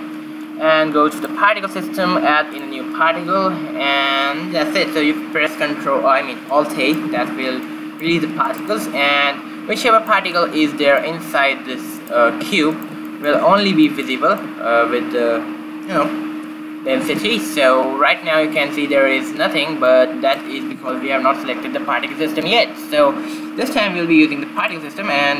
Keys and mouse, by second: 1.5-4.9 drag, 6.9 middle click, 7.5 alt+a, 8.6 alt+a, 12.4 right click, 12.7 q, 17.8 shift+z, 25.1-25.3 drag.